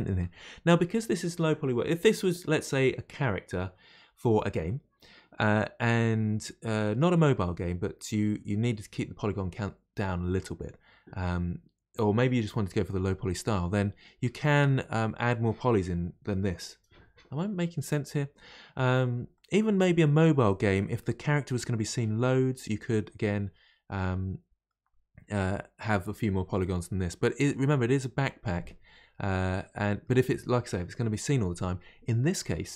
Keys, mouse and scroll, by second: 13.7-16.7 middle drag, 19.3-22.3 middle drag, 24.0-32.6 middle drag.